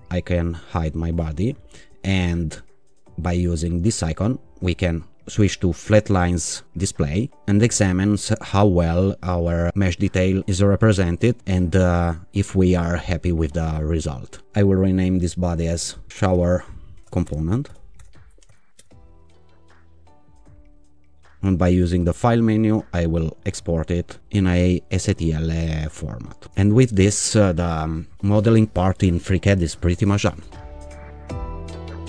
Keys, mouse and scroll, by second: 0.7 click, 5.0 click, 8.5 alt+click, 10.1-10.4 scroll up 2, 11.0-11.5 scroll down 2, 15.8-19.2 typing, 21.6 click, 23.8 click.